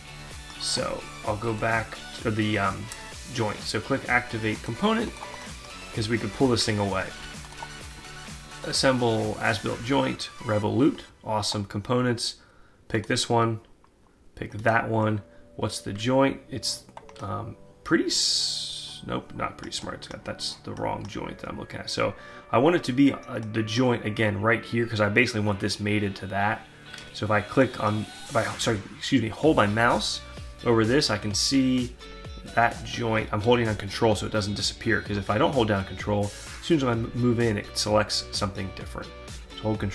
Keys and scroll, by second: 6.6 ctrl+z.